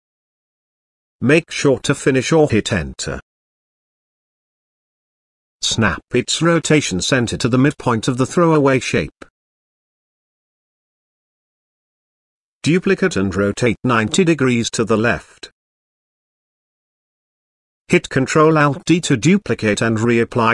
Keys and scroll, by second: 20.0 ctrl+alt+d.